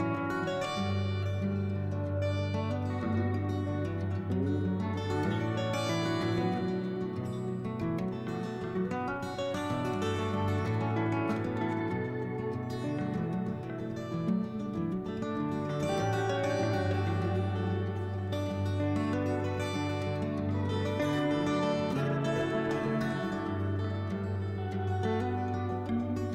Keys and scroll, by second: 0.1-1.0 typing, 2.2-3.1 typing, 12.0 s, 17.0 i, 18.1-19.7 typing, 22.4 s, 25.1 s.